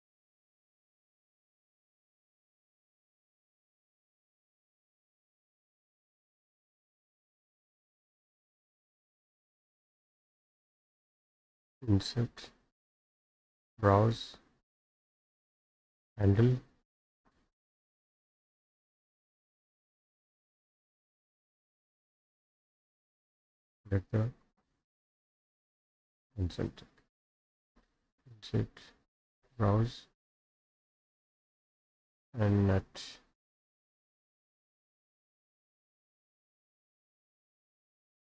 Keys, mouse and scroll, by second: 2.5 middle click, 3.8 middle click, 4.1 scroll up 1, 4.1 scroll, 4.2 scroll, 4.4 scroll, 4.4 scroll, 4.5 scroll, 5.4 click, 6.2 scroll, 9.1 click, 9.4 Escape, 9.6 Escape, 9.7 scroll, 9.8 middle click, 10.6 Escape, 11.7 click, 13.7 click, 16.3 click, 18.4 click, 20.4 middle click, 20.4-21.1 scroll up 5, 21.3-22.4 drag, 24.0 click, 25.8 click, 26.3-26.6 scroll down 4, 26.6 middle click, 26.6-27.1 scroll, 28.0 click, 29.4 click, 32.7 click, 34.5 click, 37.9 click.